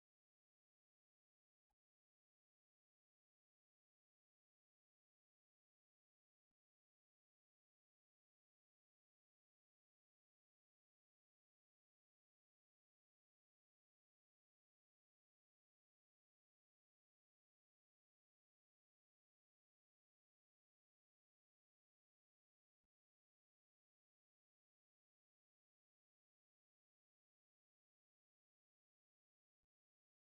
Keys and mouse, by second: 1.5 g, 4.3 r, 6.2 r, 8.0 click, 8.6 g, 11.2-15.2 drag, 16.4 click, 19.1 a, 19.3 b, 20.2 g, 21.9 r, 22.6 g, 24.5 g, 26.9 click, 27.2 g, 28.7 click, 29.4 g.